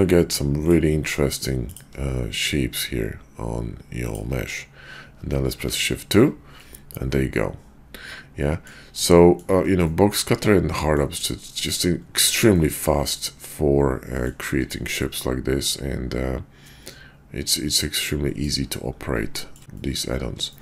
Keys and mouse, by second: 0.5 click, 0.9 q, 5.5 shift+2, 6.5-8.7 middle drag, 9.2 shift+middle drag, 9.8-11.0 middle drag, 11.4-11.7 shift+middle drag, 12.4-14.3 middle drag, 14.9-18.4 middle drag, 19.3 shift+middle drag, 19.8 middle click, 20.4 shift+middle drag.